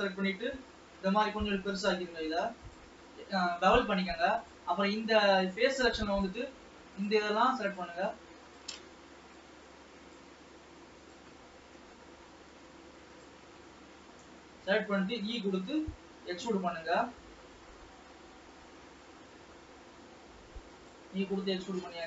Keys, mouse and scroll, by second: 4.5-6.4 drag, 7.2-11.8 drag, 11.8-13.2 middle drag, 13.2 shift+click, 13.8-15.6 middle drag, 15.6 e.